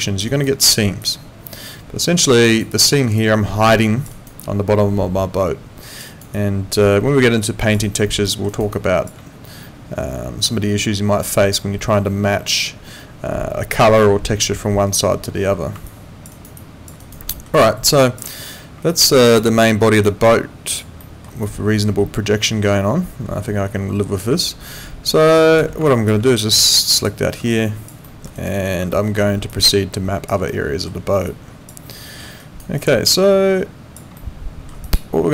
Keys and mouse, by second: 0.3 alt+right click, 0.6 alt+middle click, 1.0 alt+click, 2.5 alt+right click, 2.8 alt+middle click, 3.2 alt+click, 4.1 alt+right click, 4.4 alt+click, 6.1 alt+right click, 6.3 alt+click, 7.8 alt+right click, 8.2 alt+middle click, 8.5 alt+right click, 8.7 alt+click, 15.9 alt+click, 16.3 alt+right click, 16.5 alt+click, 17.0 alt+right click, 17.3 alt+middle click, 17.6 alt+click, 18.9 alt+click, 19.6 alt+middle click, 20.0 alt+click, 21.0 alt+middle click, 21.4 alt+click, 25.8 alt+click, 27.0 click, 27.5 alt+click, 28.1 alt+middle click, 28.4 alt+right click, 28.9 alt+middle click, 29.5 alt+click, 30.5 alt+middle click, 31.3 alt+click, 31.9 alt+middle click, 32.4 alt+right click, 32.7 alt+click, 34.2 alt+middle click, 34.8 alt+click.